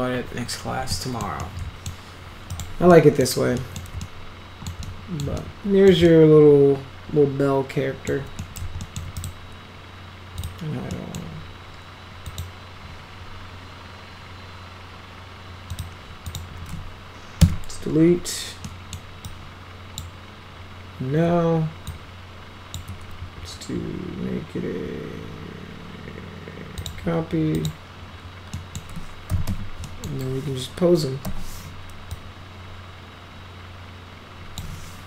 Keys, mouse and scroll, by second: 0.9-1.2 middle drag, 1.4-1.9 middle drag, 2.5 click, 2.9-3.2 middle drag, 3.6 middle click, 4.0 alt+middle click, 4.8-5.2 middle drag, 5.4-5.9 alt+middle drag, 6.1-8.1 alt+middle drag, 8.4 middle drag, 8.8 alt+middle click, 9.2 right click, 10.4 click, 10.9 middle drag, 12.2 click, 15.7 click, 16.3 click, 17.4 Delete, 18.7 middle click, 19.2 click, 21.9 shift+click, 26.8 click, 27.5 click, 28.5 middle click, 29.0-30.0 typing, 29.8 middle click, 31.3 e, 32.1-34.6 drag.